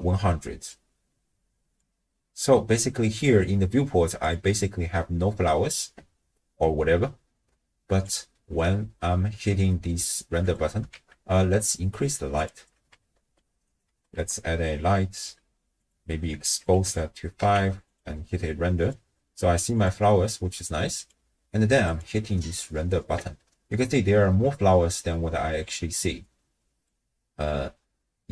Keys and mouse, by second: 0.7-2.0 drag, 2.8 click, 8.1-10.1 drag, 10.4 click, 10.9 shift+a, 12.9 r, 13.9 r, 15.9 drag, 16.6 click, 17.4 z, 18.8 click, 19.7 click, 21.1-22.5 drag.